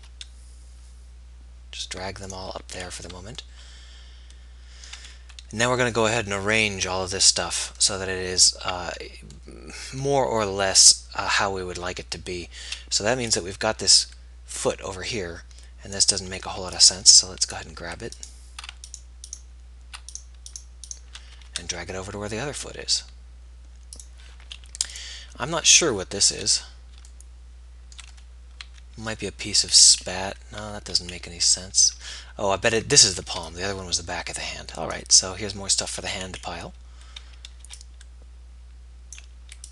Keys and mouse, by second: 0.2 g, 13.2 a, 18.4 b, 19.2 click, 21.7 g, 29.3 a, 36.1-39.3 drag, 36.1 b.